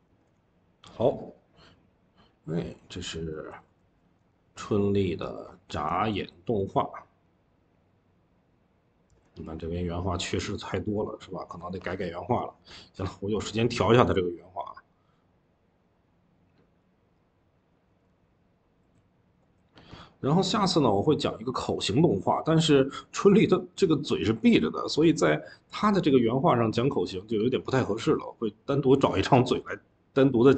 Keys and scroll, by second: 0.1 Escape, 3.5 Escape, 5.4 ctrl+s, 13.8 d, 27.6 Escape.